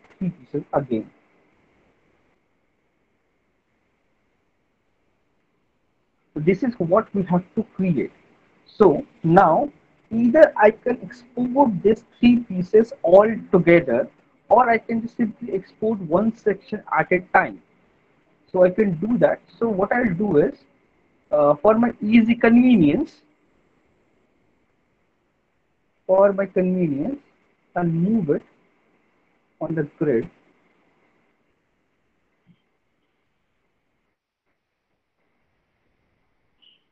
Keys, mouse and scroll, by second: 0.2 Delete, 1.2 click, 3.0 Delete, 4.0 middle click, 4.3 middle click, 5.5 alt+middle click, 5.7 alt+middle click, 7.4 alt+middle click, 8.0 middle click, 9.0 middle click, 14.6 middle click, 15.3 alt+middle click, 15.4 alt+middle click, 20.2 middle click, 20.7 alt+middle click, 23.1 click, 23.5 alt+middle click, 25.8 alt+middle click, 26.2 middle click, 30.8 click, 31.8 alt+middle click, 32.2 middle click, 32.6 alt+middle click, 33.0 middle click, 33.9 middle click, 34.7 alt+middle click, 35.1 middle click, 35.9 alt+middle click.